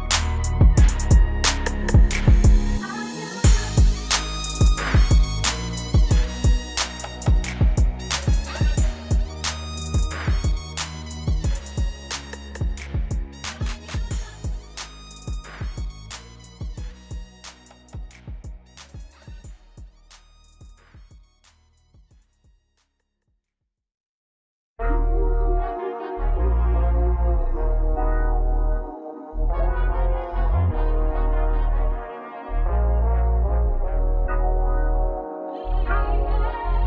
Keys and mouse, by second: 2.8 right click, 13.6 e, 16.2 KP_Subtract, 18.5 z, 21.7 KP_4, 21.9 KP_2, 23.7 Return, 28.0-31.5 typing, 33.9 KP_Add, 34.1 KP_Add, 34.5 KP_Add.